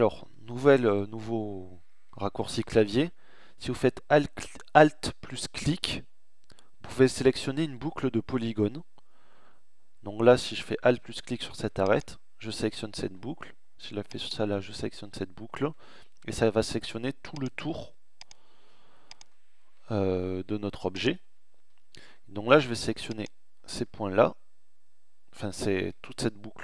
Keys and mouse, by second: 0.1-1.4 middle drag, 23.9 middle click, 24.3 middle click, 24.5 middle click, 25.6 middle click.